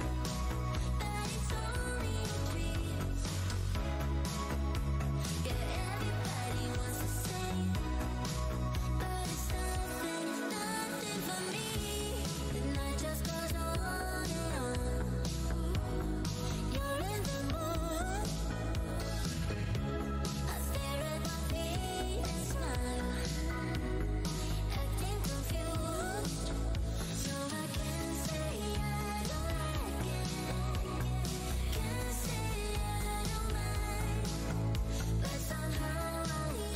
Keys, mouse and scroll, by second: 1.2 Tab, 1.3-1.9 scroll down 1, 1.9 Tab, 5.1 click, 13.7 Tab, 13.7 scroll down 1, 14.5 Tab, 14.8 scroll, 14.9-15.5 scroll up 1, 15.5-17.6 scroll, 17.6-18.6 scroll down 1, 18.6 Tab, 19.5-20.0 scroll up 1, 20.0-28.8 scroll, 29.0 alt+Tab, 29.7 Tab, 35.5 shift+right click, 35.9 Tab, 36.2 right click, 36.5 scroll up 2.